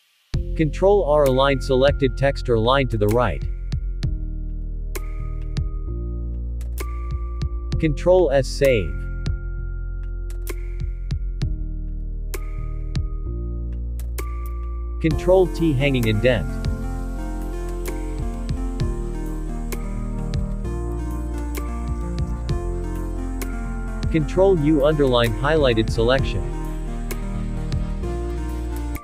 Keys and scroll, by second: 4.5 ctrl+r, 11.6 ctrl+s, 19.1 ctrl+t.